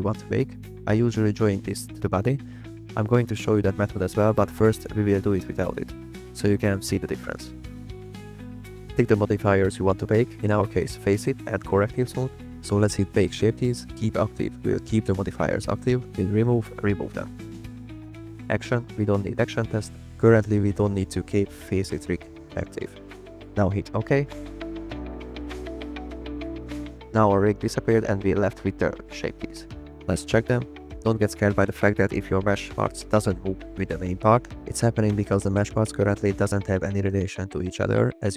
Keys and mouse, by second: 0.1 drag, 3.9 middle click, 5.2 click, 7.3 click, 9.6 middle click, 10.4 shift+middle drag, 10.6 middle click, 11.9 click, 12.6-27.1 drag, 29.7 click, 30.2 click, 31.0 click.